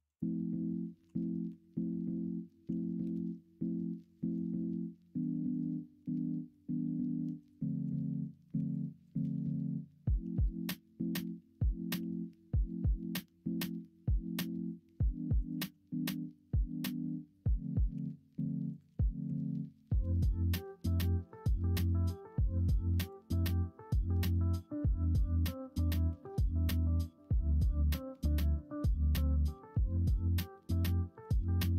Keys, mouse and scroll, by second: 1.0 KP_1, 1.4 KP_3, 2.6 g, 4.5 middle click, 8.5 2, 10.2 g, 15.6 ctrl+z, 16.8 l, 17.9 g, 19.2 s.